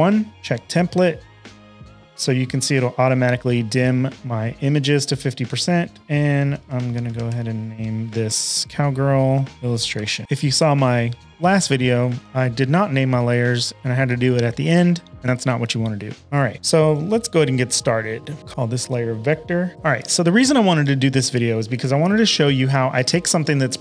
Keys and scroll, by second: 6.2-7.7 typing, 9.1-10.7 typing, 12.6 super+Tab, 16.9 v, 18.4 Return, 18.4 typing, 19.4-20.2 typing.